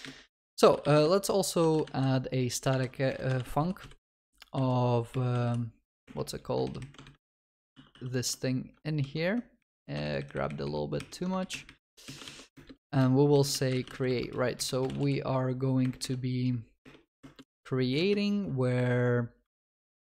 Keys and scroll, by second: 0.9 Return, 6.1 ctrl+BackSpace, 8.0 ctrl+w, 16.2 ctrl+v.